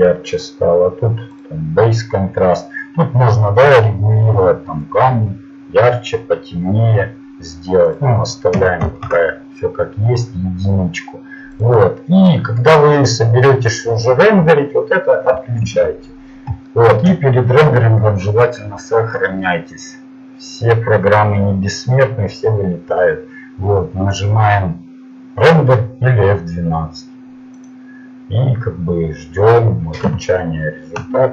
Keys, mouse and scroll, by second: 4.9 middle click, 9.1-10.6 drag, 15.6 shift+z.